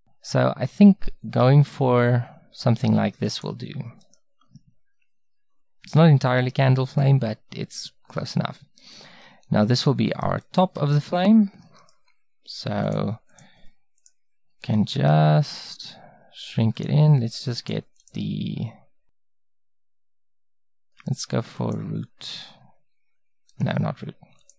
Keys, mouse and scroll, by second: 4.6-6.5 middle drag, 8.2-11.7 right drag, 11.7-14.9 middle drag, 14.9 s, 17.6-21.0 drag, 22.4 s, 24.4-24.5 drag.